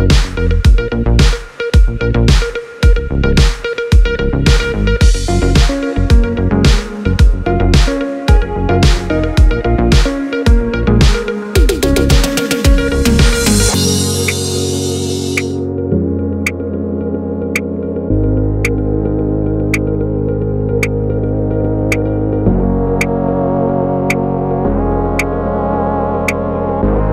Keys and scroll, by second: 9.6 BackSpace, 10.4 Return, 17.3 Left, 18.1 BackSpace, 18.4 Return.